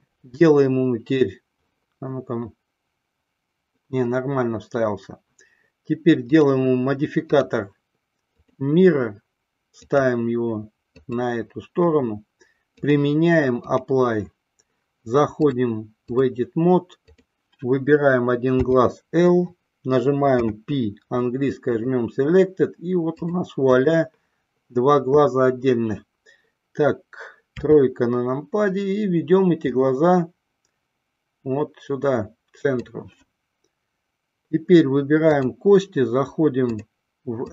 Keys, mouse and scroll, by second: 7.4-8.8 drag, 10.0 click, 13.0-14.1 drag, 15.7-16.7 drag, 17.5 click, 18.8 l, 20.6 p, 23.6 click, 27.7 KP_3, 29.8-33.1 drag, 35.6 click, 37.0-37.5 drag.